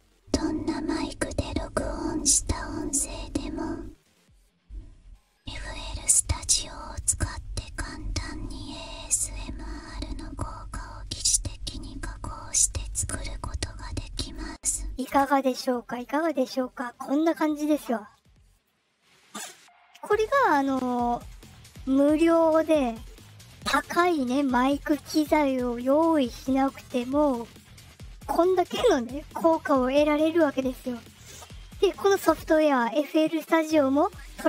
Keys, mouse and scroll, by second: 3.9-6.9 drag, 7.7-14.3 drag, 15.0 space, 18.5 click.